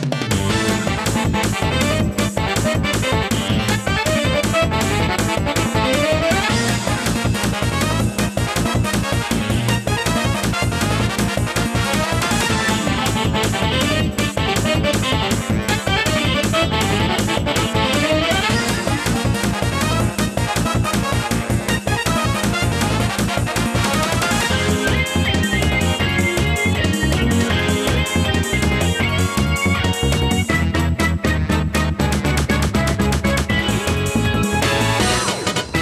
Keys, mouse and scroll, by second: 4.3 click, 13.3 click, 16.6 click, 21.5 click, 26.8 click, 28.2 shift+a, 29.2 click, 30.1 click, 30.4 shift+a, 32.4 click, 33.2 scroll down 1, 33.4 click, 34.1 shift+a, 34.9 click.